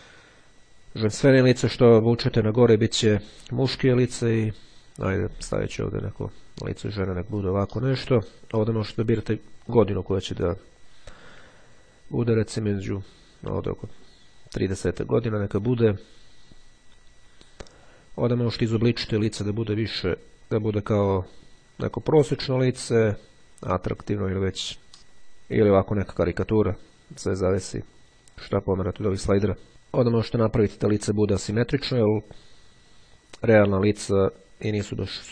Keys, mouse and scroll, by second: 1.2-3.8 drag, 4.2-7.9 drag, 9.7-11.5 drag, 12.7-13.8 drag, 14.1-15.1 drag, 17.9-21.6 drag, 22.3-24.9 drag, 26.6-29.7 drag, 30.0-35.3 drag.